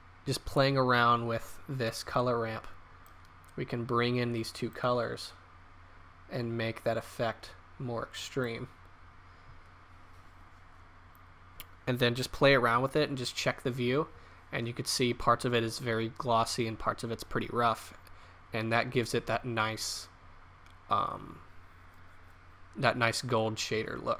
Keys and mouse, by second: 5.1-6.6 middle drag, 6.6 click, 8.5 middle click.